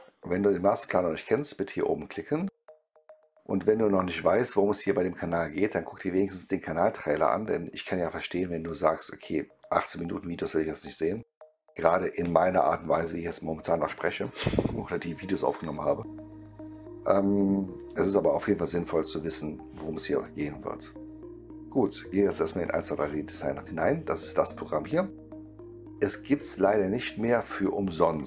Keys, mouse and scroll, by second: 22.6 click, 24.3-26.9 middle drag, 28.1 click.